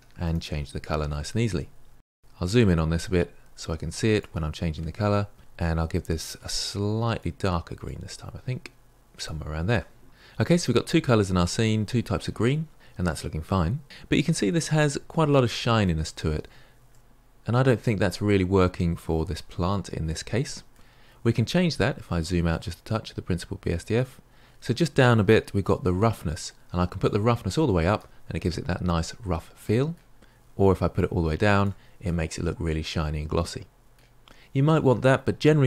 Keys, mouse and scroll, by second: 1.8-2.1 shift+middle drag, 2.1-2.4 scroll up 1, 2.4-2.8 shift+middle drag, 2.8 scroll up 2, 3.0-5.4 shift+middle drag, 5.4 click, 14.6-19.2 middle drag, 19.2-19.9 scroll down 2, 19.9 scroll down 2, 20.0-27.2 middle drag, 27.2-28.3 drag, 28.3-31.0 middle drag, 31.0-32.0 drag, 32.0-35.6 middle drag.